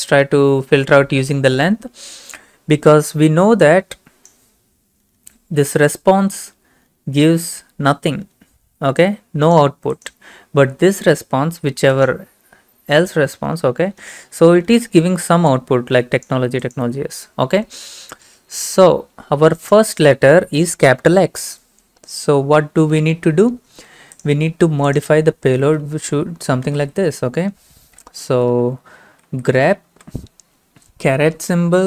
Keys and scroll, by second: 26.4-27.3 typing, 28.5 Left, 28.5 typing, 29.1 Right, 29.3 Right, 29.9 typing.